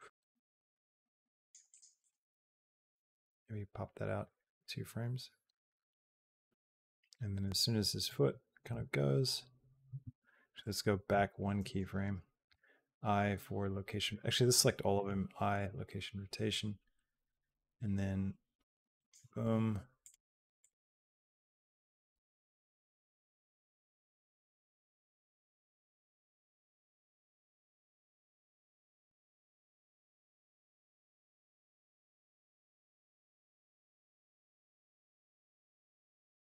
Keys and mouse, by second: 1.5 click, 1.8 click, 1.9 g, 2.9 click, 3.1 g, 4.4-7.2 drag, 8.5 g, 10.9 Left, 12.3 i, 13.9 a, 14.7 i, 16.3-18.9 drag, 21.9 g, 22.9 r, 24.8 g, 26.6-28.3 drag, 28.9 g, 30.6 g, 32.9 r, 34.8 g.